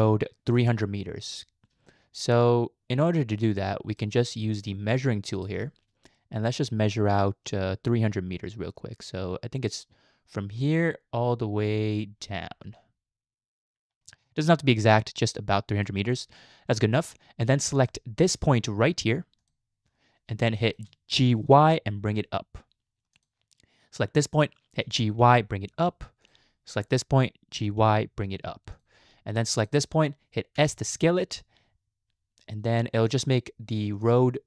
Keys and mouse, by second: 1.9 shift+middle click, 3.1 shift+middle click, 5.4 click, 12.1-15.9 drag, 17.9 shift+middle click, 20.5 shift+middle click, 21.3 g, 24.1 click, 24.9 g, 27.5 g, 30.6 s.